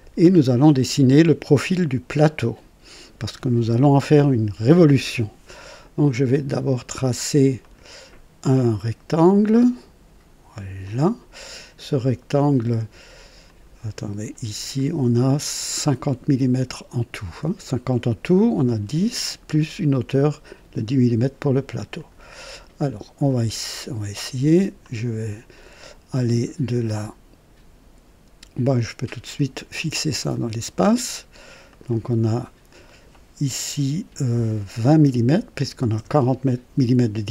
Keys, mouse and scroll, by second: 2.0-3.3 right drag, 7.6 click, 9.2 click, 10.8 click, 11.3 right click, 13.5 click, 22.0 click, 24.8 click, 30.2 click, 31.7 click, 34.8 KP_2, 35.0 KP_0, 35.9 Return.